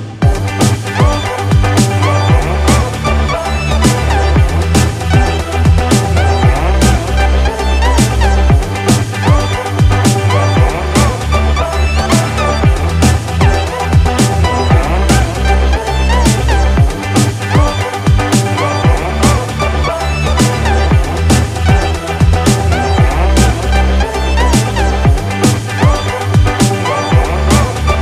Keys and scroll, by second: 17.5 ctrl+z, 20.2 ctrl+alt+z.